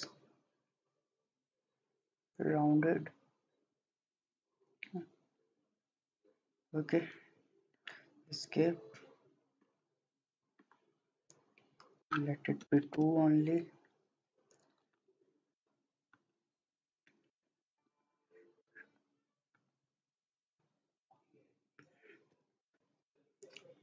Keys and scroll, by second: 7.7 Escape, 8.3 Escape, 12.7 2, 13.0 Return, 17.4 2, 17.7 Return, 22.3 2, 22.6 Return.